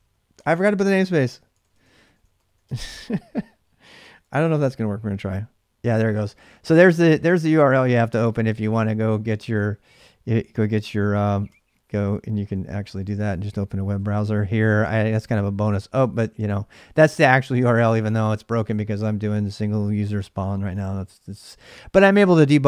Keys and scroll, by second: 0.0-4.8 typing, 8.2-9.1 typing, 11.0-16.3 typing, 17.6-18.3 typing.